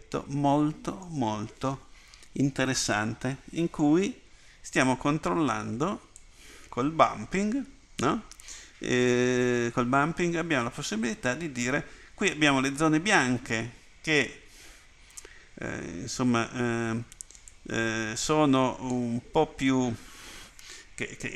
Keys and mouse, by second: 6.2-7.3 drag.